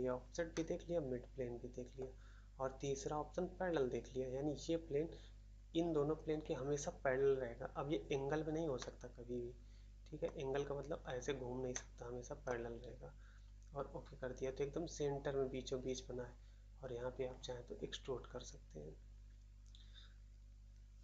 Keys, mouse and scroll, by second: 0.5 middle click, 1.9 middle click, 8.7 middle click, 10.2 middle click, 11.7 middle click, 12.4 middle click.